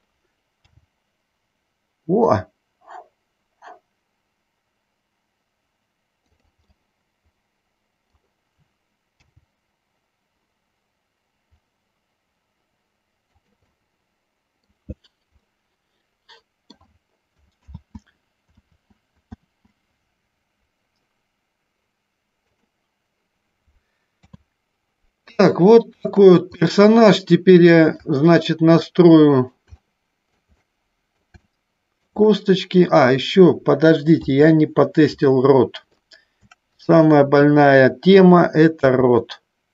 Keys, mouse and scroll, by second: 0.8 g, 7.0-8.4 middle drag, 13.9 middle click, 15.8-17.0 middle drag, 18.2 ctrl+z, 19.3 ctrl+z, 19.9 ctrl+z, 22.8 click, 24.3 KP_3, 25.6 middle click, 26.9 middle click, 28.3 shift+middle click, 29.0-30.6 middle drag, 30.9-32.3 middle drag, 32.6 middle click, 34.3 KP_3, 35.6 middle click, 37.1-38.3 drag, 39.2 r.